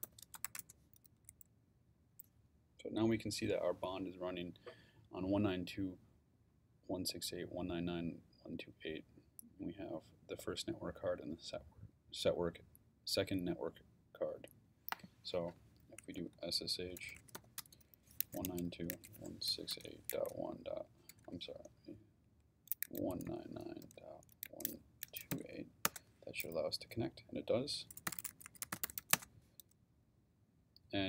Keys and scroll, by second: 0.0-1.0 typing, 15.7-21.1 typing, 22.8-25.3 typing, 25.8 Return, 27.8-29.5 typing.